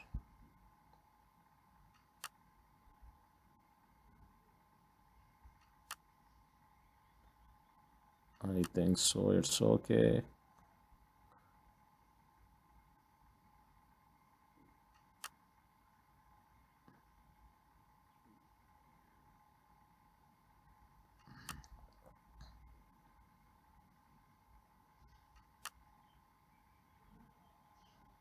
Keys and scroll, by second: 14.0 ctrl+d, 20.3 ctrl+d, 24.5 ctrl+d.